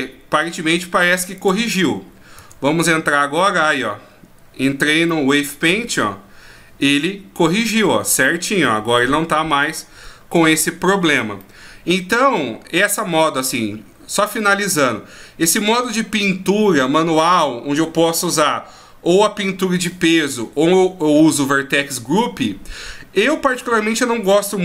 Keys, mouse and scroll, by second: 1.4 click, 2.4 Tab, 5.1 middle click, 8.3 middle click, 9.0 r, 11.4 middle click.